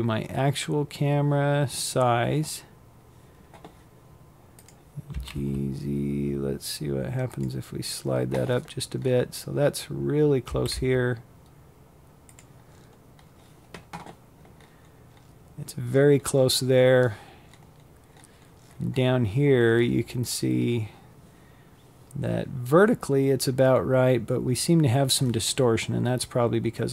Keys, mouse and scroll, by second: 2.3 click, 2.8 g, 6.5-7.4 scroll up 13, 8.1 g, 10.3-12.0 scroll down 10, 12.0-13.0 scroll up 15, 13.4-14.4 scroll down 20, 15.1-15.9 scroll up 14, 16.1-16.7 scroll down 11, 17.3-20.6 scroll up 9, 20.6-21.3 scroll down 11, 21.8-22.5 scroll up 1, 22.5-23.1 scroll down 2, 23.1-24.8 scroll up 2, 24.8-25.5 scroll down 1, 25.5-26.9 scroll up 1.